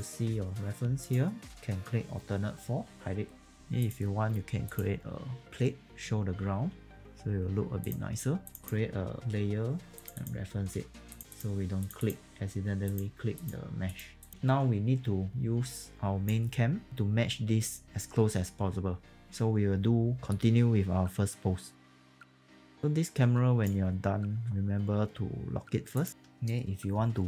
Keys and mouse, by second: 2.8 alt+4, 3.8 click, 5.4 r, 5.9 click, 6.5 w, 7.0 click, 12.9 click, 15.3 click, 19.2 q, 21.8 e, 21.9 click, 22.4 click.